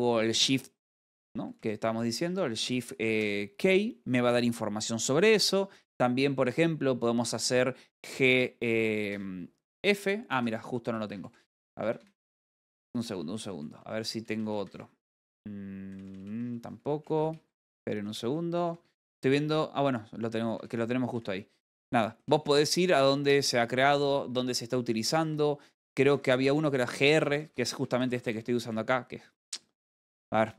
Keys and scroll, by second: 0.7 j, 2.8 l, 5.6 Escape, 6.2 j, 8.5 g, 9.6 f, 10.6-11.9 typing, 18.8-19.5 typing, 21.3-22.0 typing, 23.1 h, 24.9 Escape, 26.8 r, 30.2 h.